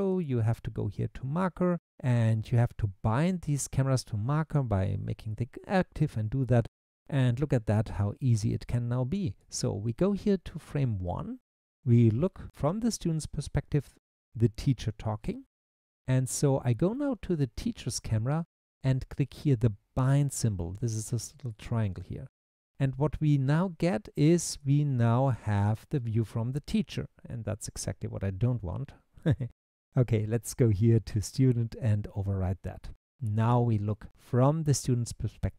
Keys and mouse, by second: 0.2-5.3 drag, 21.5 click, 30.3 click.